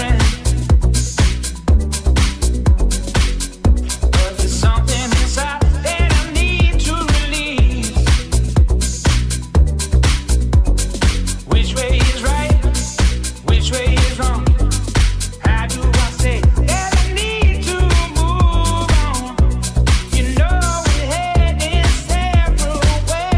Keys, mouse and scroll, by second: 9.0 Tab, 12.0-23.3 shift+middle drag.